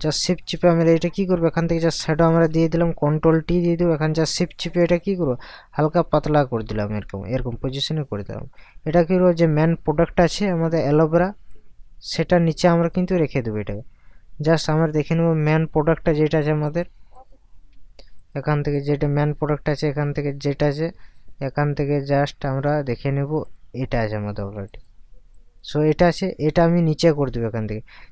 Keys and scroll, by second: 3.3 ctrl+t.